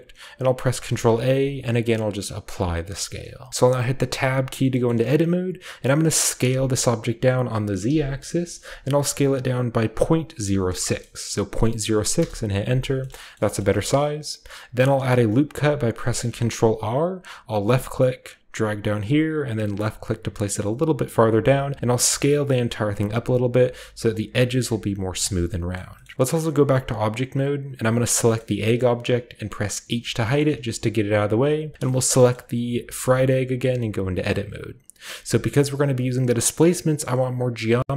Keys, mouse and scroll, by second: 0.6-1.3 typing, 2.5 click, 3.5-4.7 middle drag, 3.6-4.2 scroll up 1, 4.2 Tab, 4.2-6.5 scroll up 1, 4.9-6.5 middle drag, 6.5 s, 7.8 z, 9.8 ., 10.3 0, 10.7 6, 12.2 Return, 13.1 shift+middle click, 13.3 shift+middle click, 13.6-15.1 shift+middle drag, 13.6-14.4 shift+scroll up 1, 14.4-15.0 shift+scroll up 1, 15.0 shift+scroll up 1, 15.2-16.9 shift+scroll down 1, 15.2-16.6 typing, 17.6 click, 19.8 click, 21.5 s, 23.0-23.6 scroll down 1, 23.6 click, 23.7 s, 23.9-25.0 drag, 23.9 scroll down 1, 25.0 scroll down 1, 25.1-27.9 middle drag, 26.5 Tab, 27.9 click, 28.2-30.2 shift+middle drag, 28.9-29.9 shift+scroll up 1, 29.9-31.7 scroll up 1, 29.9 h, 30.4-33.7 shift+middle drag, 31.7-33.1 shift+scroll up 1, 31.7 typing, 33.1 shift+scroll up 1, 33.7 Tab, 35.2-37.9 middle drag, 35.4-35.9 scroll up 1, 35.9 scroll down 1.